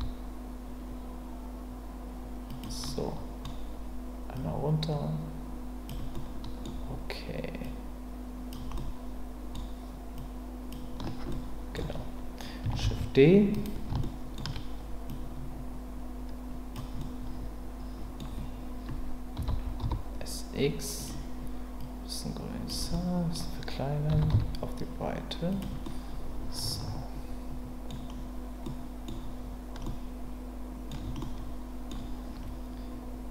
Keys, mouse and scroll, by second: 2.5 click, 2.9-3.4 middle drag, 4.4-5.9 drag, 6.2-6.6 middle drag, 7.7-8.5 drag, 8.7-9.5 middle drag, 10.2-10.7 drag, 11.4-11.7 middle drag, 12.8 shift+d, 14.1 shift+middle drag, 15.1-16.7 drag, 17.1-18.2 middle drag, 19.4 s, 19.8 z, 21.0 click, 21.8 click, 22.9 middle click, 24.1 s, 24.3 x, 25.5 click, 26.7-27.9 middle drag, 27.9-28.6 scroll down 1, 28.6-29.1 middle drag, 29.1-29.8 scroll down 1, 29.8-30.9 middle drag, 31.2-31.9 middle drag.